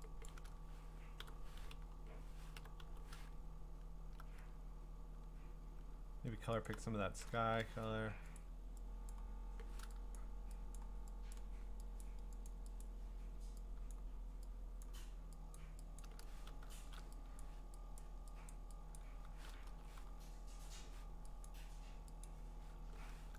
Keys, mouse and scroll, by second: 0.0 alt+click, 0.0-0.3 scroll, 0.3 click, 0.3 u, 2.6-3.8 typing, 6.7 alt+click, 8.4 click, 9.1 click, 9.2 alt+click, 10.2 click, 10.9 click, 11.3 click, 12.0 click, 12.5 click, 12.8 click, 13.9 click, 14.8 click, 15.6 click, 16.0 click, 16.8 typing, 17.4 click, 18.0 click, 18.5 click, 19.0 click, 19.5-20.6 typing, 21.5 click, 22.3 click.